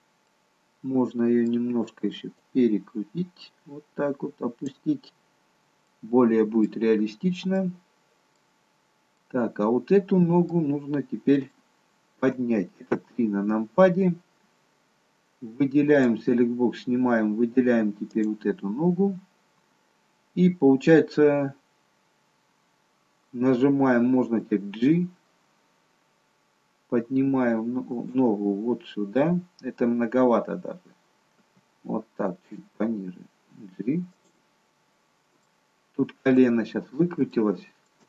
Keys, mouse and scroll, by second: 0.2 middle click, 2.6 click, 5.3-5.8 scroll up 3, 5.8 middle click, 7.5 middle click, 8.5-9.2 scroll down 2, 9.2 middle click, 11.5 shift+middle click, 12.8 KP_3, 14.4-15.2 scroll up 1, 15.9 click, 15.9-16.3 scroll up 1, 17.1-17.6 scroll up 1, 18.0 click, 24.4 g, 31.3 g, 35.4 shift+middle click, 36.6-37.0 scroll up 2, 37.4 shift+middle click.